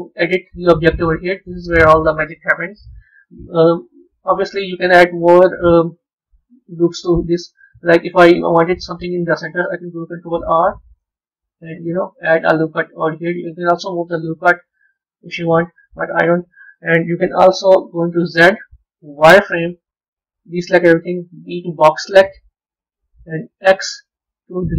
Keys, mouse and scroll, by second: 3.0 middle click, 5.1 middle click, 8.1 middle click, 9.9 ctrl+r, 12.2-14.2 middle drag, 17.1 KP_1.